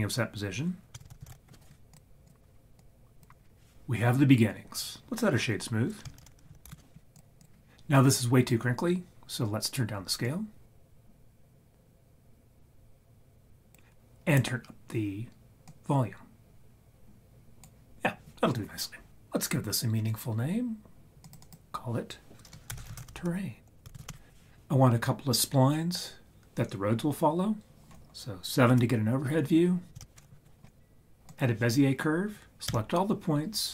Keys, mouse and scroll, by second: 1.0 shift+a, 2.8-3.2 drag, 6.2 shift+a, 6.8 o, 10.2-13.7 drag, 15.7-17.7 drag, 21.2 click, 21.4 click, 23.1 r, 28.7 KP_7, 32.7 a.